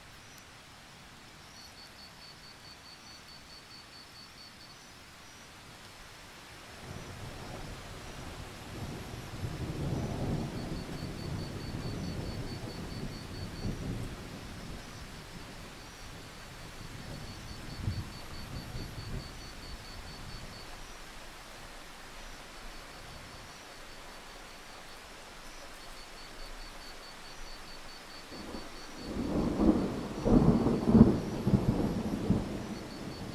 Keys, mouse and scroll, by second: 0.0-0.6 scroll down 1, 0.6-4.6 drag, 6.9 alt+scroll down 1, 7.1-7.6 scroll up 2, 8.2-9.6 alt+scroll up 2, 9.6 click, 11.7-12.9 scroll up 2, 13.9 click, 15.4 Escape, 16.6 click, 17.5 Escape, 18.1 click, 18.8 Escape, 19.9 click, 24.7-25.4 alt+scroll up 1, 25.4-30.1 drag, 30.3 scroll down 1, 30.4 click, 31.7-33.1 scroll down 1, 33.1 click.